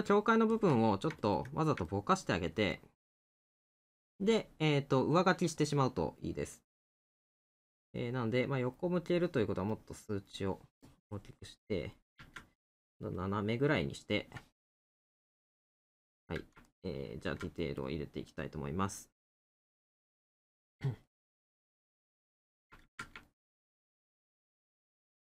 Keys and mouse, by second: 1.9 middle click, 14.7 middle click, 15.9 middle click, 20.8 middle click, 23.3 middle click.